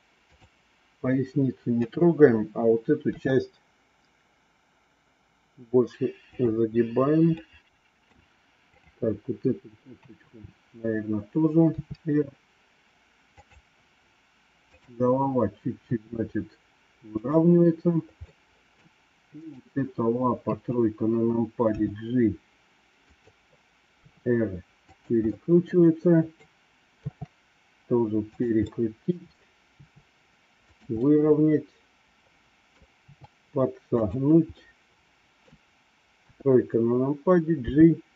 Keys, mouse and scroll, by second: 1.7 KP_3, 3.0 r, 7.2 middle click, 8.7 click, 9.8 KP_3, 11.6 r, 14.6 click, 15.7 r, 18.1 middle click, 19.3 click, 20.3 KP_3, 21.6 g, 23.8 r, 25.1-26.2 middle drag, 28.5 middle click, 29.6 r, 31.0-32.6 middle drag, 32.8 r, 34.6 middle click, 36.2 KP_3, 37.6 g.